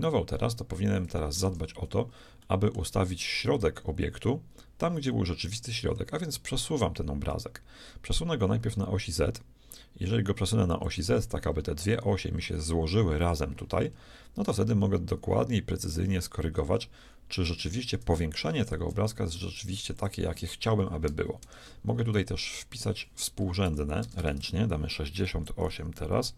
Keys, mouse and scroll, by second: 0.7-4.4 middle drag, 1.8 z, 6.3-8.3 drag, 11.4-14.0 middle drag, 14.5-16.6 shift+drag, 18.4-19.4 shift+middle drag, 19.6-21.6 drag, 22.7-24.7 drag, 24.2 BackSpace.